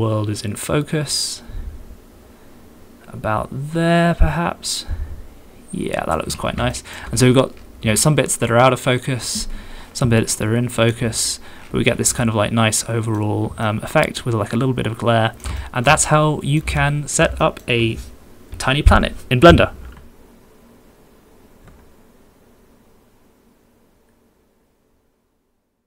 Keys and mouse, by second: 6.7 shift+middle click, 8.0-10.6 shift+middle drag, 10.6 shift+click, 10.7 shift+middle click, 10.8 shift+click, 11.9 middle click, 12.2-13.2 shift+drag, 13.2 shift+middle click, 13.6-15.4 shift+drag, 15.6 ctrl+shift+click, 16.0 shift+click, 16.8 ctrl+click, 17.4 shift+click, 19.9 Home.